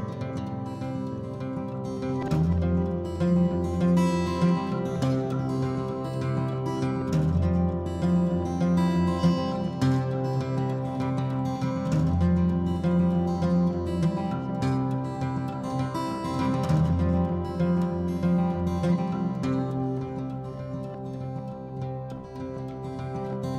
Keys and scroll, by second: 10.6-11.7 typing, 12.7 Return, 14.2-16.8 typing, 19.4-21.8 typing, 23.1 p.